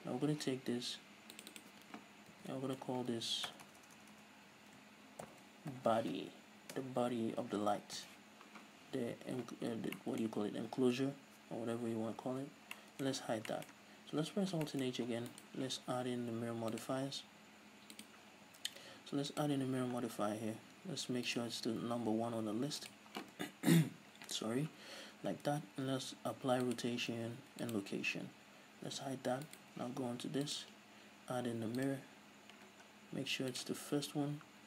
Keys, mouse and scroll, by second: 0.0-0.8 right drag, 1.7-10.3 drag, 4.0 BackSpace, 8.4 Return, 10.3-15.7 middle drag, 12.6 h, 13.6-13.9 scroll down 2, 14.6 alt+h, 14.7 scroll up 2, 15.3-15.7 scroll up 2, 15.7 right click, 17.1-17.9 drag, 18.3-21.9 drag, 20.3-20.8 scroll down 2, 20.8-21.6 scroll down 1, 21.6 scroll down 1, 21.9 scroll up 2, 23.2 click, 25.8 ctrl+a, 29.4 h, 29.8 right click, 30.9-34.4 drag, 33.0-33.9 scroll down 2, 34.2-34.6 scroll up 4.